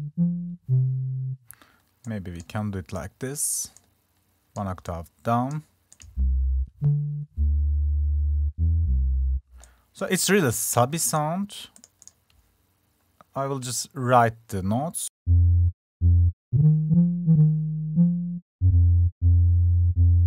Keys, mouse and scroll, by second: 11.4 click.